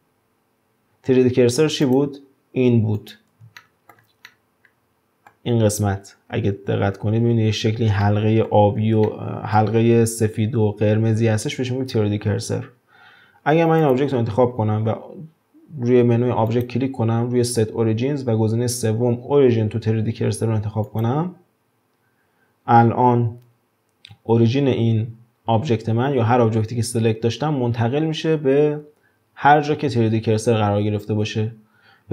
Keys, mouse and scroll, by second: 1.8 click, 3.0 click, 3.5-7.3 shift+middle drag, 8.0-11.7 middle drag, 11.7-12.1 scroll down 1, 12.1 scroll up 2, 13.8 click, 16.5-19.5 drag, 29.5-32.1 scroll up 2.